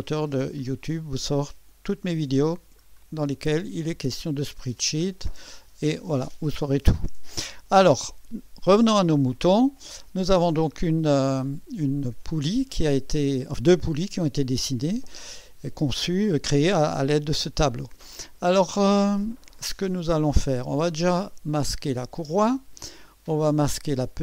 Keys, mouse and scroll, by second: 0.6-1.4 scroll down 2, 1.7-2.8 scroll down 2, 2.8-4.5 scroll up 6, 5.1 scroll down 1, 8.6 click, 12.4 click, 21.8 click, 22.3 space.